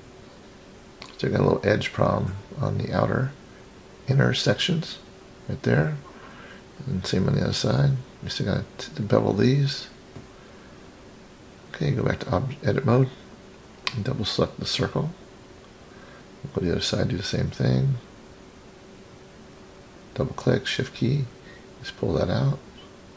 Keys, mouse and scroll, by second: 1.2-1.9 scroll up 6, 2.6 middle click, 4.5 scroll down 1, 5.0 middle click, 6.6-7.3 scroll up 2, 8.3-8.6 scroll down 2, 9.5 click, 11.1-11.8 drag, 12.5-13.3 scroll up 3, 14.0 click, 14.2 click, 15.6-16.5 scroll down 3, 16.5-17.5 middle drag, 17.9-18.8 scroll up 5, 19.3 shift+click, 19.5 shift+click, 20.1 scroll down 3, 20.9-23.1 drag.